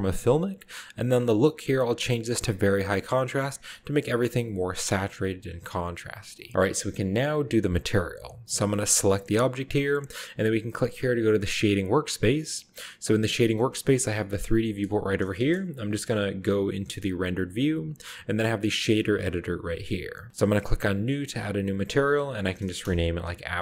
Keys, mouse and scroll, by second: 2.6-3.6 drag, 3.9-5.8 scroll up 2, 4.3-5.8 shift+middle drag, 8.6 drag, 8.7 right click, 11.6 click, 13.3 scroll up 1, 13.9 scroll up 1, 14.3 middle click, 15.4 KP_0, 16.4 z, 16.9 z, 21.2 click, 22.1 click, 22.8 BackSpace.